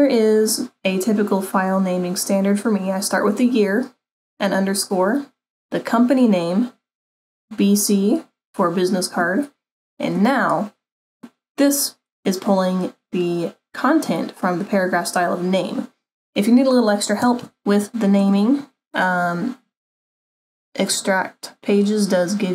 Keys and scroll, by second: 17.4 super+-.